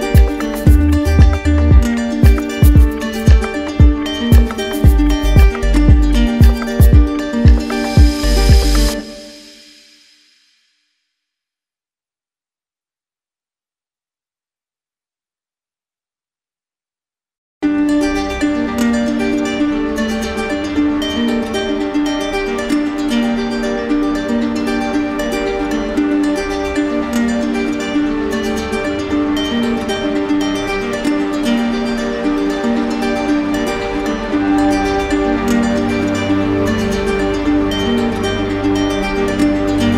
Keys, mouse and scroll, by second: 2.9-4.4 right drag, 4.5 q, 5.8-6.9 right drag, 7.6 right click, 8.5 click, 12.2 click, 14.9 click, 15.7 right click, 16.1 right click, 16.5 shift+right click, 17.2 shift+right click, 18.1 right click, 19.6 q, 20.5 w, 21.5 right click, 21.9 right click, 23.1 alt+click, 25.7 click, 26.3 right click, 26.7 shift+right click, 27.5 alt+right click, 28.0 alt+click, 28.0 right click, 28.6 alt+right click, 28.6 typing, 30.1-31.2 drag, 31.4-32.5 right drag, 32.7-33.7 right drag, 36.3-37.3 drag, 38.2 click, 38.9 click, 39.7 right click.